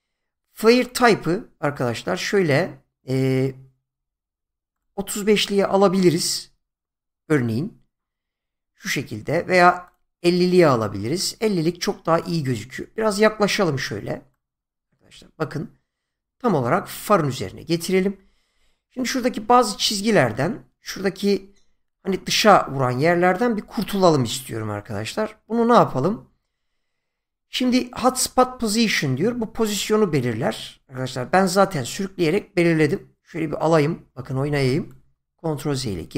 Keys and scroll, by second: 35.7 ctrl+z.